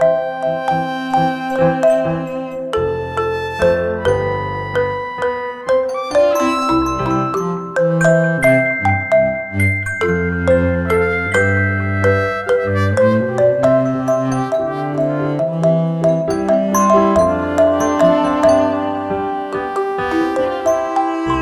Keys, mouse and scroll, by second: 0.0 click, 3.1 click, 7.1 click, 16.2 ctrl+z, 16.9 click.